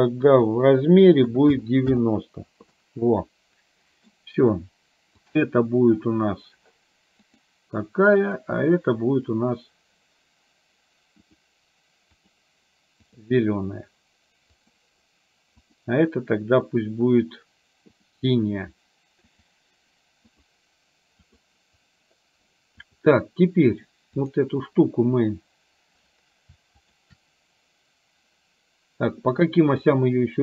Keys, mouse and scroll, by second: 0.4-2.1 drag, 2.8-4.1 middle drag, 5.4 click, 11.4 click, 12.3-13.3 drag, 14.5 click, 19.4-20.5 drag, 21.4 click, 24.3 click, 26.9 shift+click.